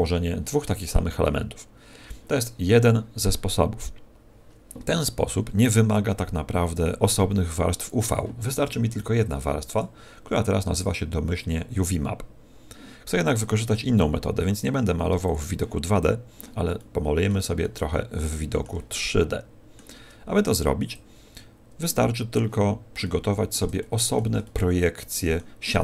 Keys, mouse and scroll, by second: 7.0 click, 21.1 click, 23.7 shift+middle click, 24.4 middle click.